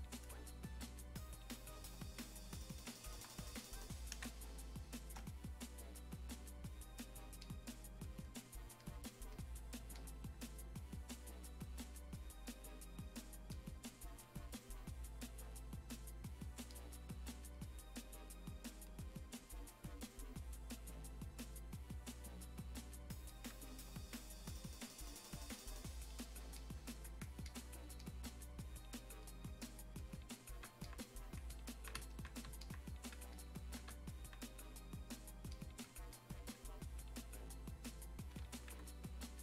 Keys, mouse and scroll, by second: 4.2 space, 4.6 click, 4.7 space, 5.4-39.4 drag.